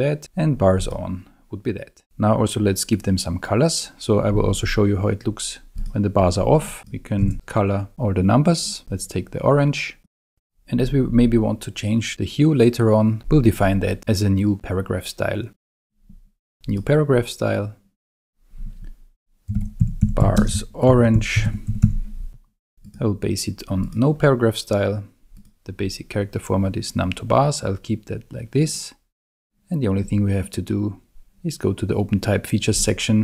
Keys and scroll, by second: 7.2 super+a, 19.3-22.3 typing.